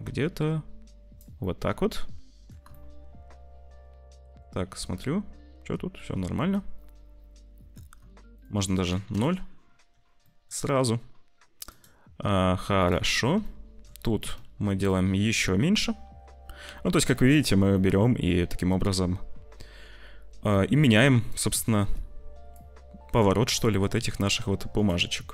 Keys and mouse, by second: 1.4-2.5 middle drag, 2.8-4.4 shift+middle drag, 4.8-5.9 shift+middle drag, 8.4 middle click, 10.1 middle click, 11.6 middle click, 13.3 shift+middle click, 14.8-17.2 drag, 17.7 shift+middle click, 21.3 click, 22.5-24.9 drag.